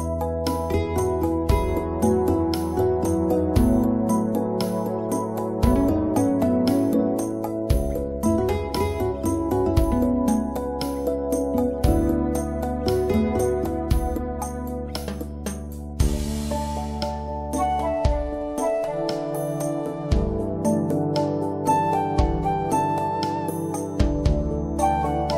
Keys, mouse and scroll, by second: 4.8 click, 6.4-6.7 scroll down 1, 7.7 click, 8.1 scroll up 1, 8.4-8.7 scroll down 1, 10.8-11.2 scroll up 1, 11.4 click, 17.8 right click, 18.1 click, 21.0 2, 21.6 Return, 22.8 right click, 23.2 click.